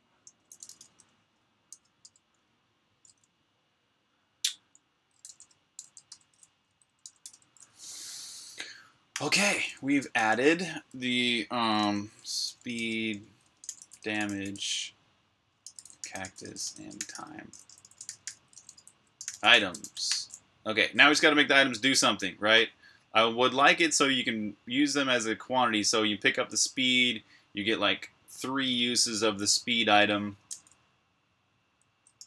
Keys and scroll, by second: 0.0-1.3 typing, 3.6-7.5 typing, 8.9-10.2 typing, 11.7-20.2 typing, 21.8 typing, 31.4 d, 31.9 BackSpace.